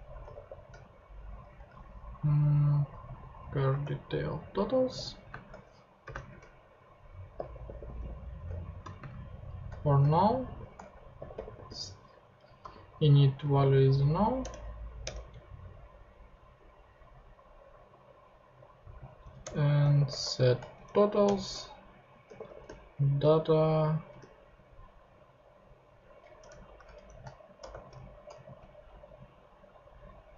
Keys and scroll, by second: 0.3 shift+t, 1.5 ctrl+shift+Tab, 3.4 super+c, 3.7 ctrl+super+Tab, 4.6 ctrl+Tab, 4.8 ctrl+super+v, 5.3 super+space, 6.0-12.6 typing, 12.2 Right, 14.4 alt+Return, 15.7 Return, 19.4 Return, 19.5-20.5 typing, 20.9 shift+Down, 21.2 Return, 21.9-23.1 typing, 24.2 p, 26.4-28.9 typing.